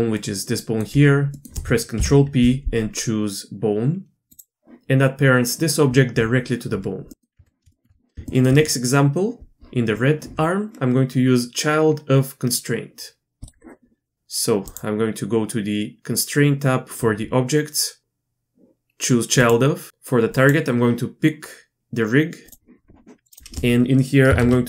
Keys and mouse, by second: 2.0 ctrl+p, 7.4 Tab, 8.3 shift+middle drag, 18.0-19.5 drag, 20.3 click, 23.3-24.6 drag.